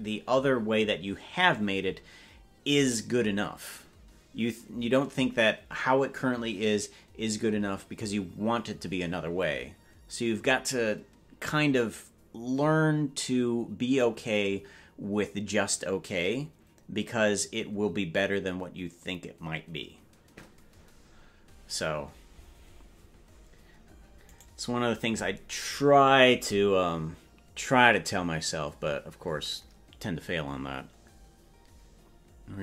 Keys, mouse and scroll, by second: 24.4-29.2 right drag.